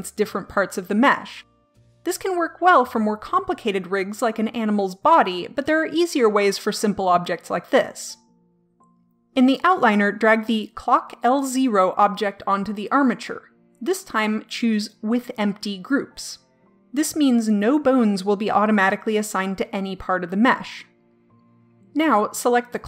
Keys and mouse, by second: 10.7-14.2 drag.